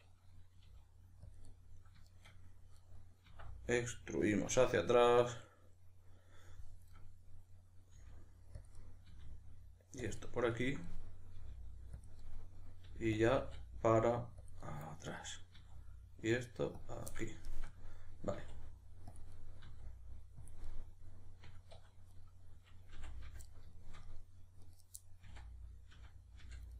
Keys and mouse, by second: 0.6 g, 1.3 click, 1.5-4.4 middle drag, 3.3 e, 4.4 click, 4.5-8.7 middle drag, 8.0 g, 8.7 click, 8.8-10.1 middle drag, 9.1 e, 10.1 click, 10.2-12.1 ctrl+middle drag, 11.4 g, 12.1 click, 12.2 middle click, 12.8 g, 13.2 click, 13.4 e, 14.5 click, 14.6 middle click, 15.1 right click, 15.6 e, 16.8 click, 17.1-19.2 middle drag, 18.4 e, 19.2 click, 19.4-20.5 middle drag, 19.6 e, 20.5 click, 20.7-22.1 middle drag, 21.8 2, 22.1 right click, 23.0 f, 23.5-24.6 shift+middle drag, 24.6 right click, 25.0-26.7 middle drag, 25.2 f.